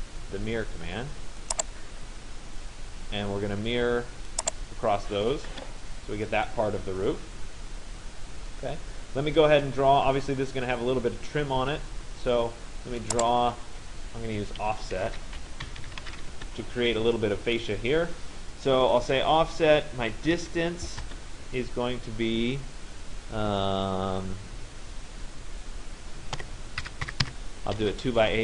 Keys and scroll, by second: 5.1 Return, 14.0 Escape, 16.4 Return, 20.0 d, 21.1 Return, 26.0 /, 26.4 7.